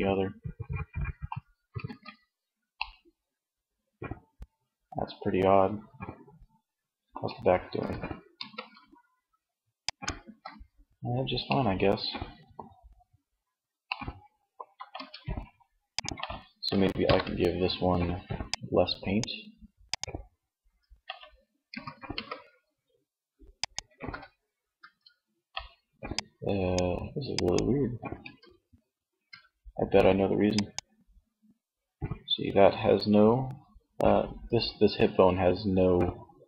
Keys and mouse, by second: 0.7 ctrl+z, 6.8 r, 9.1-10.5 drag, 9.2 ctrl+z, 10.5 middle click, 14.0 Tab, 15.9 ctrl+l, 19.6 Tab, 20.8 r, 23.0 ctrl+z, 23.9 Tab, 27.1 Tab, 28.2 Tab.